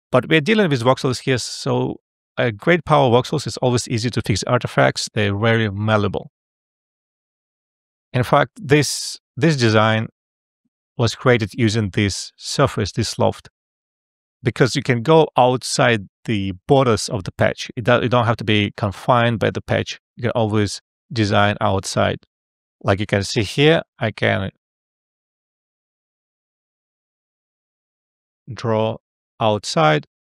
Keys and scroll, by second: 8.1 alt+f, 26.5 e.